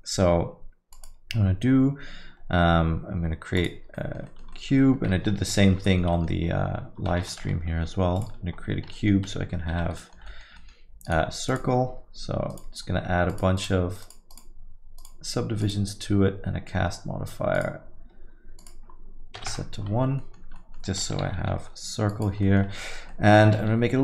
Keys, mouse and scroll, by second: 8.5 n, 14.4 7, 16.2 9.